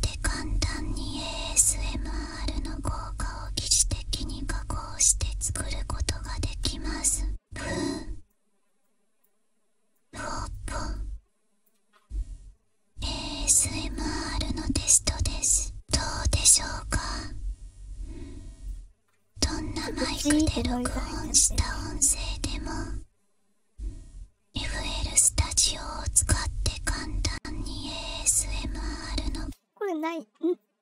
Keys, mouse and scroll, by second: 0.2-0.7 drag, 1.2-3.4 drag, 4.5-6.2 drag, 6.5-7.8 drag, 8.2-9.2 drag, 9.9 click, 10.9-11.6 drag, 13.3 click, 15.1-18.6 drag, 21.2-28.2 drag, 29.3 space, 29.8 click.